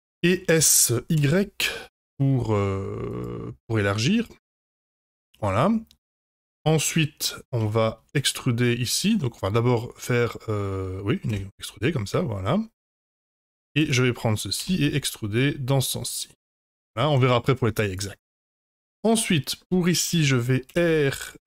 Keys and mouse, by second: 0.5 s, 3.8-5.5 middle drag, 6.3-7.2 middle drag, 7.6 Tab, 8.0 3, 8.6-10.7 middle drag, 11.2 e, 13.1 middle click, 13.7 click, 14.5 e, 16.8 middle click, 18.6 middle click, 20.6 r.